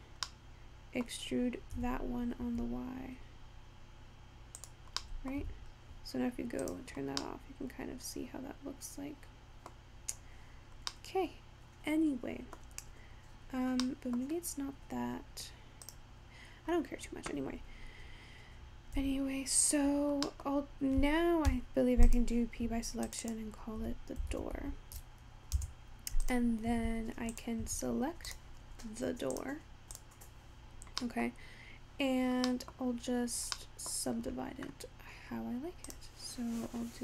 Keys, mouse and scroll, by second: 0.3-1.9 middle drag, 1.9 e, 5.1 middle click, 5.5 Tab, 5.7-6.1 scroll down 4, 6.7 click, 7.2-7.8 scroll up 3, 7.8-9.9 middle drag, 9.9-10.5 scroll down 5, 10.5-11.1 scroll up 6, 11.4-12.7 middle drag, 12.7-13.9 scroll down 4, 13.9-14.2 scroll up 8, 14.2 middle click, 14.4-16.0 scroll down 1, 16.0 click, 17.8-18.3 scroll down 5, 18.3-20.2 scroll up 5, 20.2 Tab, 20.6-21.9 middle drag, 21.9 p, 23.4-24.4 drag, 24.4 o, 26.2 drag, 26.8 Tab, 27.4 click, 27.7 Tab, 28.4 click, 29.4 click, 30.5-31.1 scroll down 3, 31.1-31.5 middle drag, 31.5-31.9 scroll down 1, 31.9-32.5 scroll up 2, 32.5-33.1 middle drag, 33.1-33.7 scroll up 3, 33.7-35.9 middle drag, 35.9-37.0 drag.